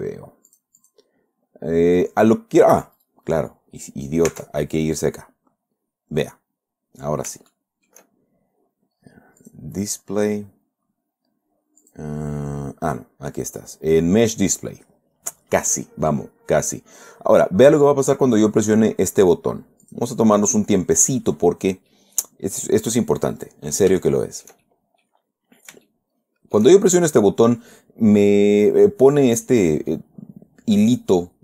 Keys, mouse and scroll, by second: 0.9 click, 1.6-2.4 scroll up 1, 2.6 scroll up 1, 3.4 click, 4.7 Tab, 6.2-6.6 scroll down 1, 6.9-7.2 scroll up 1, 7.9 shift+middle click, 9.8 click, 10.3-10.6 scroll down 2, 10.9 scroll down 2, 12.2 click, 13.4 scroll down 2, 20.2 click, 21.4 scroll down 2, 22.2 scroll down 1, 22.3-23.4 drag, 24.4-25.6 shift+drag, 25.8-26.2 scroll up 1, 26.2 shift+click, 28.1 scroll down 1, 29.8 click, 30.7 scroll up 1.